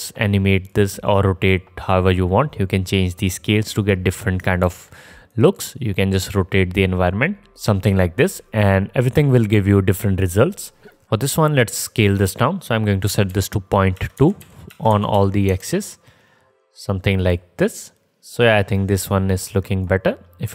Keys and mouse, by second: 4.9 ctrl+z, 5.6-7.6 drag, 5.6-8.5 middle drag, 5.6-7.6 right drag, 8.5-12.6 drag, 12.1 middle click, 12.1 right click.